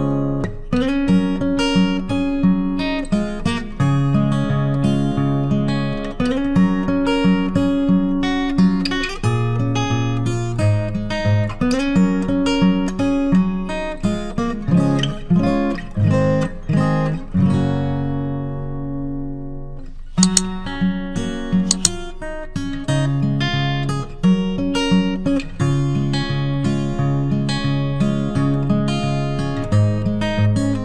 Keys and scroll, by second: 0.2 ctrl+alt+shift+e, 24.1 ctrl+d.